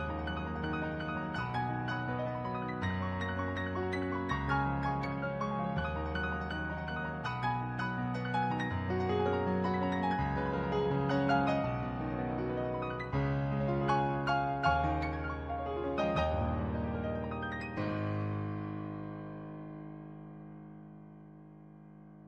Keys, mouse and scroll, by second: 1.0 ctrl+z, 3.0 ctrl+z, 3.5 ctrl+z, 4.5 ctrl+z, 5.3 ctrl+z, 5.7 ctrl+z, 5.9 ctrl+z, 8.3 ctrl+z, 8.7 ctrl+z, 9.6 ctrl+z, 10.2 ctrl+z, 10.8 ctrl+z, 14.1 ctrl+z.